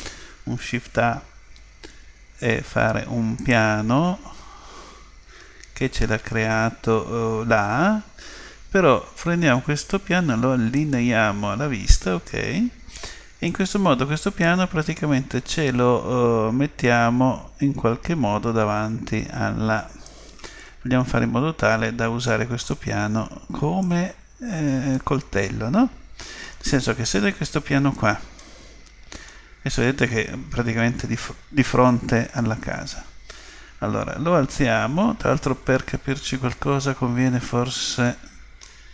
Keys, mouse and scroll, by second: 0.4 shift+a, 4.9 middle click, 5.2-5.9 scroll up 1, 5.9-6.7 scroll up 1, 6.7-8.3 middle drag, 10.8 click, 13.5 click, 15.5 click, 21.1-22.9 middle drag, 23.8 click, 25.4-27.3 middle drag, 28.4-30.4 middle drag, 32.7 KP_3, 38.0-38.9 middle drag.